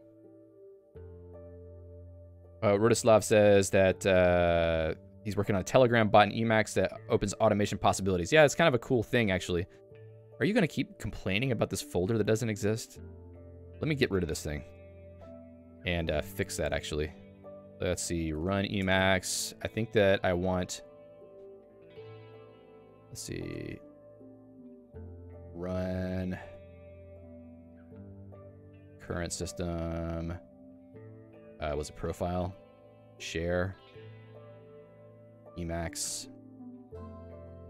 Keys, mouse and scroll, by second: 14.8 super+f, 18.9 Return, 21.1 click, 22.5 super+e, 23.7 h, 24.1 h, 25.7-27.3 typing, 28.6-29.8 typing, 31.8 j, 33.0 j, 35.1-36.0 typing.